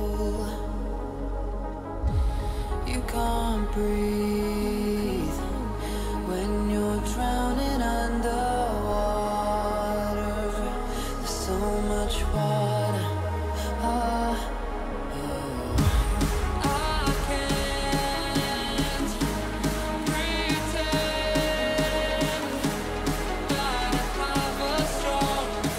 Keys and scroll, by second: 0.7 [, 5.2 [, 7.8 ], 10.5 ], 12.2 [, 18.6 h, 21.2 ctrl+alt+shift+e, 22.9 ctrl+j.